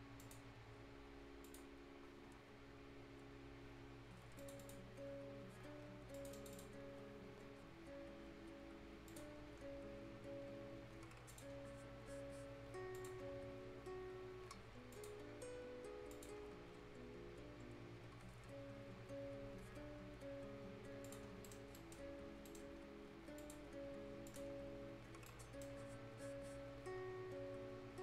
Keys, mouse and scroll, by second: 2.3 scroll down 1, 4.4 click, 5.2-5.5 scroll up 1, 6.2 click, 7.2 scroll down 1, 7.5 scroll up 1, 9.1 click, 9.3 scroll down 1, 9.5 scroll up 1, 11.3 click, 11.5-11.9 scroll down 1, 11.9 scroll up 1, 13.0 click, 13.3 scroll down 1, 13.6-13.9 scroll up 1, 14.9 click, 15.2-15.5 scroll down 1, 15.5-15.9 scroll up 1, 16.1 click, 16.4 scroll down 1, 18.7 scroll up 1, 19.9 scroll up 1, 21.1 click, 21.3 scroll down 1, 21.5 right click, 22.1-22.5 scroll up 1, 22.5 right click, 22.7-23.4 scroll down 1, 23.4 click, 23.8 scroll up 1, 24.3 click, 24.5 scroll down 1, 24.9 scroll up 1, 25.3 right click, 25.7 scroll down 1, 26.0 scroll up 1.